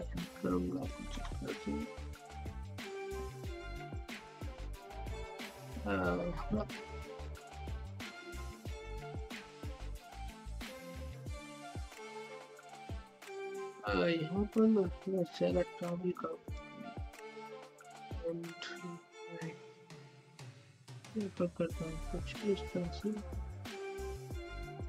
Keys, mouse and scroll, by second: 1.6-3.1 typing, 5.0-6.4 drag, 6.4-7.9 typing, 9.2-13.4 typing, 15.1 typing, 16.5-17.9 drag, 17.9-19.9 typing, 21.2-22.9 drag, 22.9-24.3 typing.